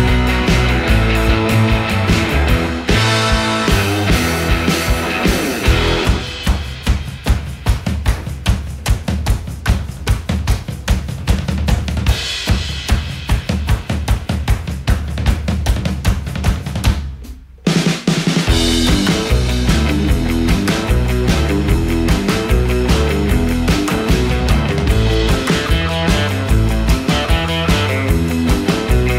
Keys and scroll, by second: 0.2 super+z, 0.5 super+z, 10.0 super+z, 12.3 super+z, 25.7 super+z.